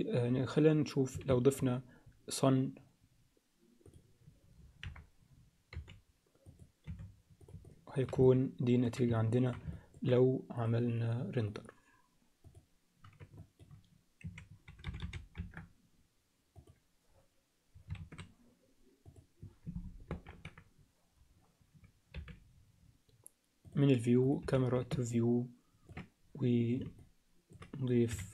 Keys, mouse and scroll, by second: 1.3 shift+a, 4.8 KP_1, 5.7 g, 6.8 r, 7.6-8.1 alt+middle drag, 8.3-8.8 ctrl+alt+middle drag, 9.2 alt+shift+middle click, 9.8 ctrl+alt+middle click, 11.5 click, 12.5 drag, 13.5-15.6 shift+drag, 15.0 0, 18.0 shift+a, 20.1 ctrl+alt+KP_0, 22.1 n, 24.2 click, 24.9 ctrl+alt+n, 25.1-25.9 ctrl+alt+middle drag, 27.0 alt+middle click.